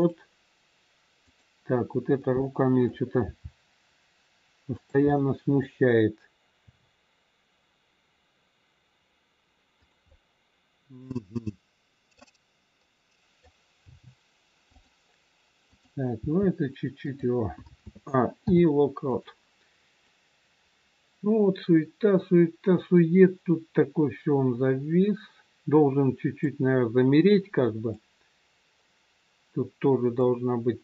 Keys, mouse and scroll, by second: 1.3 click, 2.1 middle click, 3.3 g, 5.1 middle click, 6.6 r, 10.1 middle click, 13.7 middle click, 13.7 g, 15.7 click, 16.6 g, 17.8 a, 18.3 i, 20.0 click, 27.9 click.